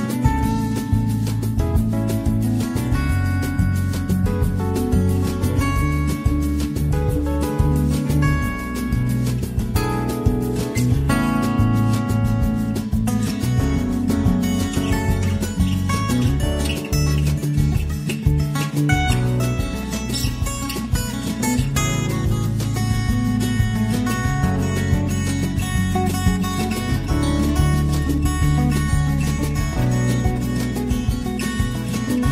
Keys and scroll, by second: 11.2 Down, 11.3 t, 14.6 <, 20.3 ctrl+v, 20.6 ctrl+d, 20.8 Down, 23.2 >, 24.0 Right, 24.2 Left, 24.4 Down, 25.9 >, 27.3 <, 28.3 <, 28.5 Down, 29.6 z, 31.6 <.